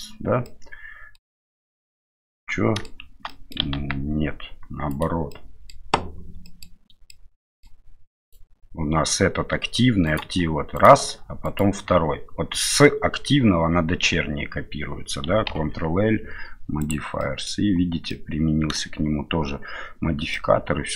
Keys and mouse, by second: 0.4-1.2 middle drag, 1.8-2.9 middle drag, 3.3-3.9 middle drag, 3.8 ctrl+z, 4.9 right click, 5.3-5.8 middle drag, 6.5 middle click, 7.1-7.6 middle drag, 8.2 right click, 10.1 right click, 10.8 right click, 11.4 shift+right click, 15.5 ctrl+l, 17.2 middle drag, 18.1-18.8 middle drag, 20.3-20.9 middle drag.